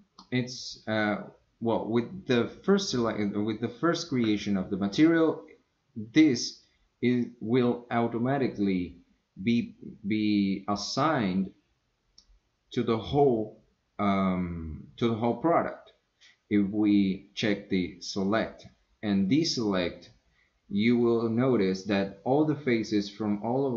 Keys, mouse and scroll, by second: 18.2 click, 19.4 click, 21.0 click, 23.1-23.7 middle drag.